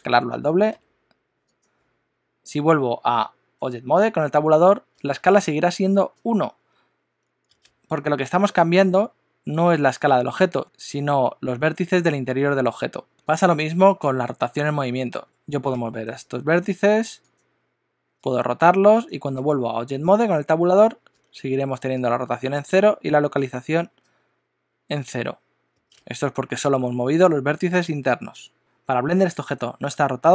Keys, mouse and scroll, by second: 3.6 Tab, 14.0 Tab, 15.2 g, 18.2 r, 19.4 Tab.